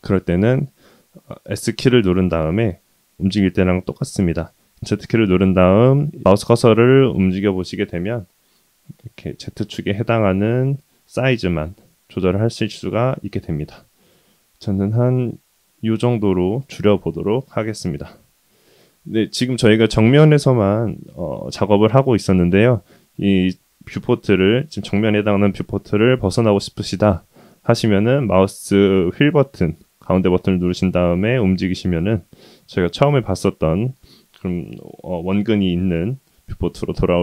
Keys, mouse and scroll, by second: 30.1-34.1 middle drag, 34.6-35.4 middle drag, 36.6-37.0 shift+middle drag.